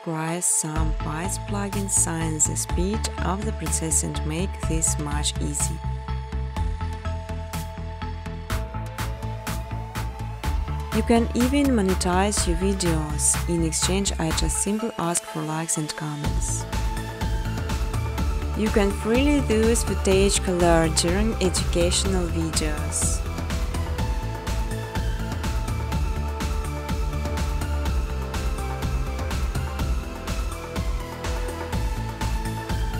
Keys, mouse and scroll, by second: 0.1 right click, 2.4 click, 2.7-8.5 typing, 9.7 right click, 11.3 click, 12.1 click, 12.6 click, 13.4 click, 13.7 click, 14.6 click, 15.2 v, 15.4 click, 16.0 click, 16.5 click, 17.5 click, 17.8 click, 20.3 click, 23.9 click, 24.9 click, 26.7 click, 27.8 click, 30.1 click.